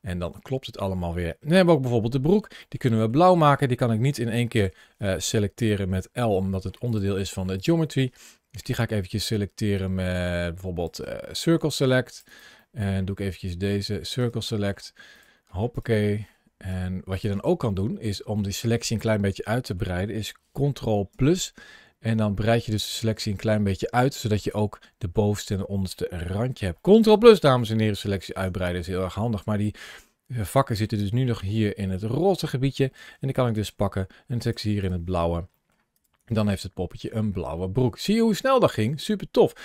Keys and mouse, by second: 1.6 shift+middle click, 2.1 middle click, 2.5 middle click, 2.8 shift+middle click, 4.4 a, 4.5 a, 5.5 l, 6.4 middle click, 7.1 middle click, 8.3 c, 10.8 right click, 11.1 middle click, 12.1 right click, 12.5 middle click, 12.9 c, 14.0 right click, 14.4 middle click, 14.6 c, 15.9 middle click, 16.1 c, 17.6 middle click, 19.0 middle click, 21.0 ctrl+KP_Add, 22.3 middle click, 24.3-25.3 middle drag, 26.3 shift+middle click, 26.7 middle click, 27.1 shift+middle click, 27.5 middle click, 28.0 shift+middle click, 29.4 shift+middle click, 30.5 middle click, 32.2 shift+middle click, 33.4 g, 34.2 click, 35.4 middle click, 35.7 click, 36.0 Tab, 36.3 middle click, 37.4 shift+middle click, 38.3 shift+middle click, 39.4 shift+middle click.